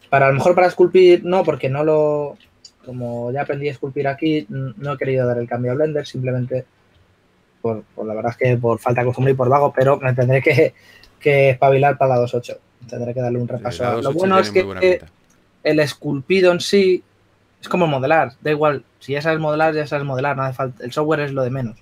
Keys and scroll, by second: 1.5 typing, 2.8-3.8 typing, 6.4-7.5 typing.